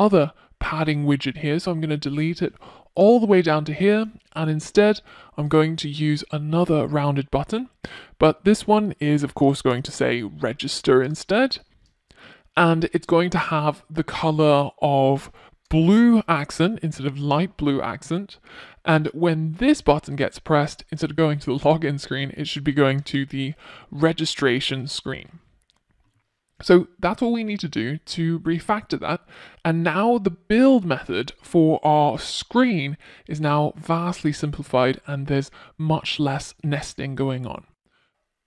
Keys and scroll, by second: 5.8 super+v, 11.9 ctrl+shift+super+z, 17.6 Return, 18.9 Return, 26.3 Return, 26.9 Return.